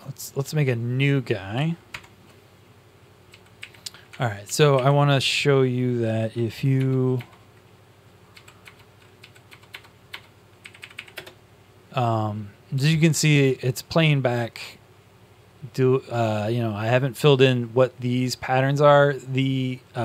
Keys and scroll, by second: 1.8 ctrl+shift+\, 3.2-5.1 typing, 8.0-8.7 typing, 10.9 Up.